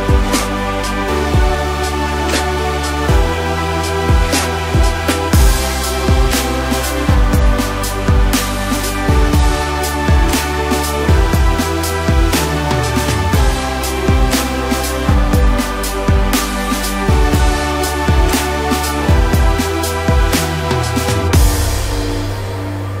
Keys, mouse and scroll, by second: 2.0-3.3 middle drag, 3.3 click, 3.6-4.3 scroll up 1, 4.3 scroll down 1, 4.6-5.5 middle drag, 5.5-6.3 scroll up 3, 6.3-7.2 scroll down 2, 7.2 KP_Decimal, 8.6-10.2 scroll down 4, 10.2-12.8 drag, 12.8 scroll down 2, 13.1 middle click, 13.8 scroll down 2, 14.0-16.4 middle drag, 16.4 click, 17.4 scroll up 1, 17.9 scroll down 2, 18.2-19.8 middle drag, 19.8-20.3 scroll up 2, 20.3 scroll down 1, 20.6-23.0 middle drag.